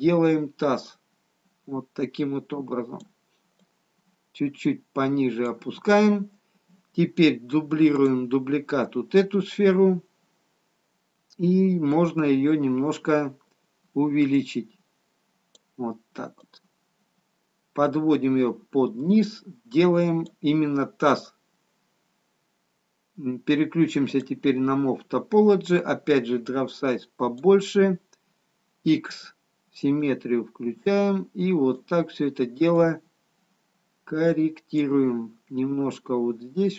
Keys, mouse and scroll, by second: 3.0 typing.